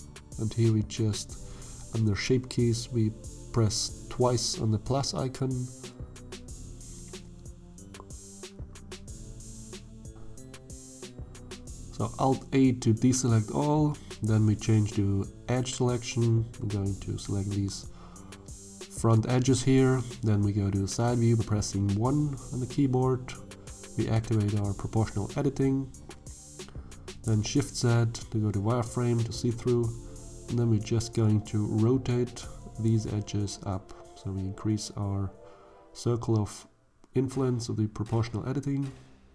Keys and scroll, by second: 3.0 1, 5.1 Tab, 6.3 shift+z, 10.4 alt+a, 12.0 shift+z, 21.6 1, 26.6 shift+z, 32.0 r.